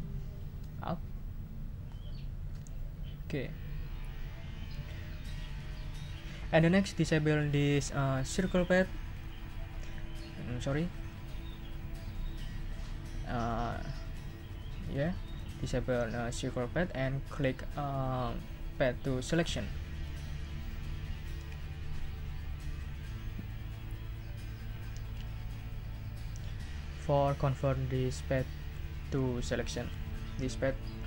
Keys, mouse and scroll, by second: 1.4 shift+Up, 9.1 click, 14.8 click, 15.2 click, 19.3 click.